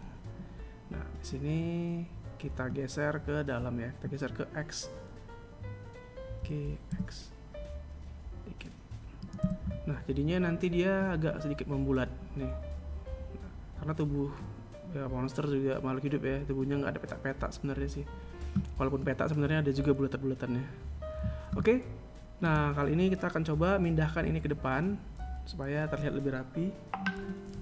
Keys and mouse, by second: 5.9 g, 9.0 a, 11.1-14.2 right drag, 22.0 right click, 27.4 KP_7.